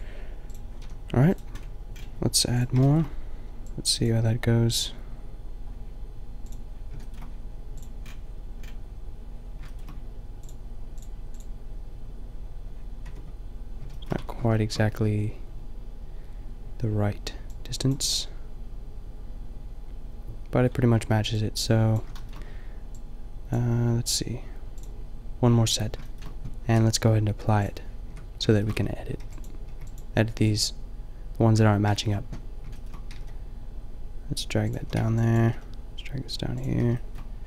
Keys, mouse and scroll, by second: 0.8 a, 1.7 click, 13.2 Tab, 14.2 Tab, 21.9-22.3 drag, 28.2 Tab, 28.8 a, 29.3 b, 29.8 b, 30.4 b, 33.2 g, 34.8 a, 34.9 b, 35.4 g, 36.6 a.